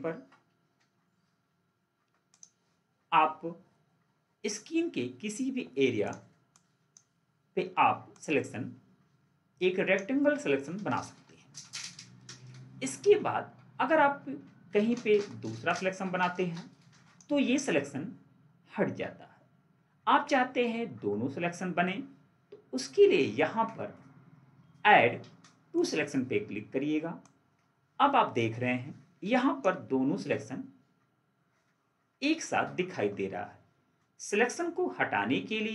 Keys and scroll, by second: 1.1 ctrl+4.